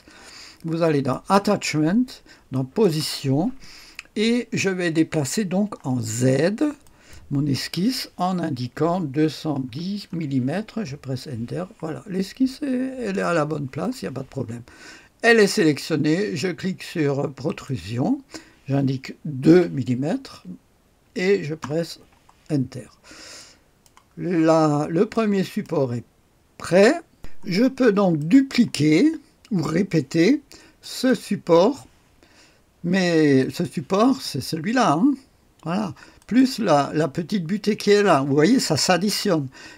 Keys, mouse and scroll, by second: 0.8 click, 2.4 click, 6.7 click, 9.0 KP_2, 9.6 KP_1, 10.0 KP_0, 10.8 Return, 12.4-13.1 scroll up 1, 13.1 click, 17.4 click, 19.4 KP_2, 21.5 Return, 22.6-23.3 scroll down 1, 23.3 click, 24.1-25.1 scroll down 1, 25.1 click, 26.8 click, 27.8-28.7 scroll up 2, 28.7 click, 30.7 click, 33.3 click, 34.2 space, 35.7 space, 36.1 click, 36.6 space.